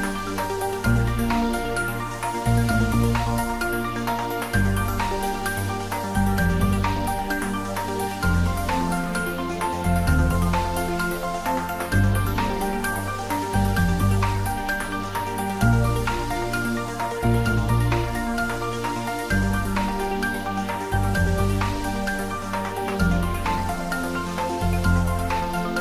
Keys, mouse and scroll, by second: 1.2 ctrl+r, 2.1 click, 4.4 ctrl+r, 4.8 click, 7.2 click, 7.5 middle click, 8.3 ctrl+r, 8.8 click, 10.6 middle click, 11.5 ctrl+r, 12.0 click, 14.2 ctrl+r, 15.4 click, 17.5 ctrl+r, 18.3 click, 18.9 click, 20.7 Tab, 21.2-21.5 scroll down 1, 21.5 middle click, 22.5-23.0 scroll up 1, 23.0 Tab, 23.5 scroll up 1, 24.5 ctrl+r, 25.0 click.